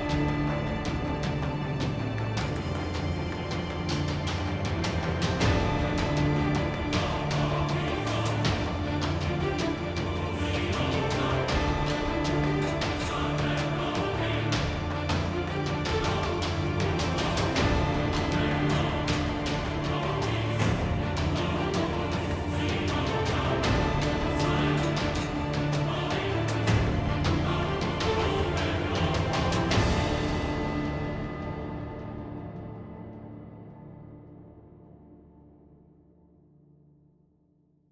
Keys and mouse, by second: 0.0 right click, 0.4 ctrl+Tab, 1.8-5.8 typing, 3.0 ctrl+Tab, 5.5 right drag, 7.0 Tab, 8.4-10.0 typing, 9.0 Tab, 11.0 Tab, 11.4-14.9 typing, 11.6 Tab, 12.6 Tab, 12.7 Tab, 14.5 Tab, 15.9 Tab, 16.8 ctrl+Tab, 18.6 g, 19.6 ctrl+Tab, 20.4 g, 21.4 click, 21.5 g, 22.6 KP_1, 22.7 z, 23.2 k, 24.3 z, 24.7 Tab, 25.0 a, 25.7 KP_Divide, 26.3 z, 26.4 KP_Divide, 26.5 Tab, 28.2 ctrl+Tab, 28.4-28.9 drag, 28.9 shift+e, 29.3 shift+e, 30.2-32.3 drag, 32.3 ctrl+b, 34.4 Tab, 35.0 Tab, 35.4 ctrl+z, 35.5 ctrl+z, 35.7 ctrl+b, 37.2 Tab, 37.7 Tab.